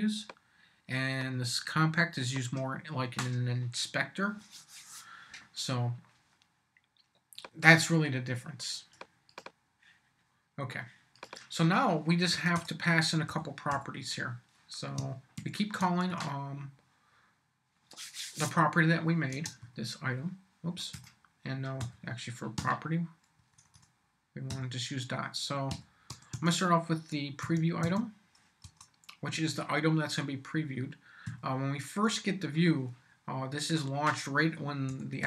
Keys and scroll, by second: 12.3 Return, 13.3 m, 13.7 y, 15.4 shift+q, 16.1 shift+Tab, 16.9 Tab, 19.3 space, 19.6 =, 20.9 BackSpace, 21.8 ., 22.6 p, 23.4 BackSpace, 25.5-26.8 typing, 27.4 Tab, 28.6 Return, 31.2 =, 34.6-35.2 typing.